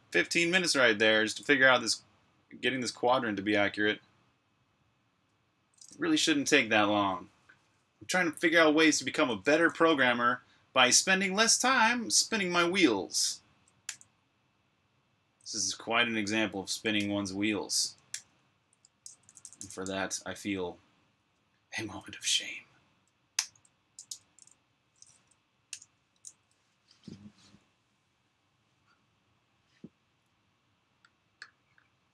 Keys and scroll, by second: 13.7 j, 16.9 super+], 18.1 super+[, 18.6 super+], 19.2 j, 19.3 j, 19.5 j, 23.3 i, 23.9 Escape, 25.7-26.1 typing, 27.2 typing.